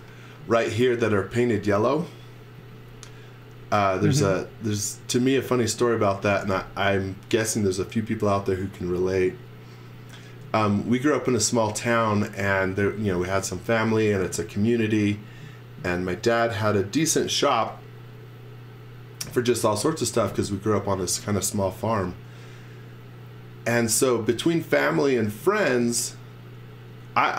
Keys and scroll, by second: 2.6 z, 4.4 x.